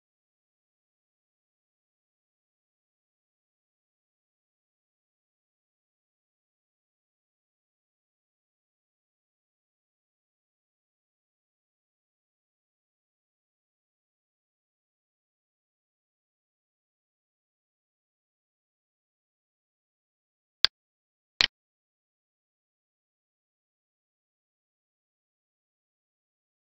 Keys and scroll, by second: 0.3 ctrl+s, 0.9 ctrl+Left, 1.6 Left, 3.4 ctrl+x, 6.6 Right, 8.7 alt+e, 10.4 ctrl+v, 11.1 ctrl+s, 12.1 Right, 13.0 End, 16.3 ctrl+s, 18.6 alt+e.